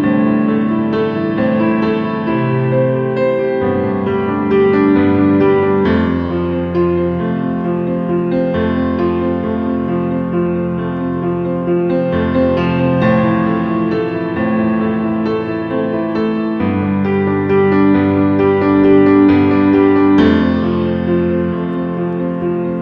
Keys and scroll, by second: 2.7 ctrl+a, 15.9 ctrl+k.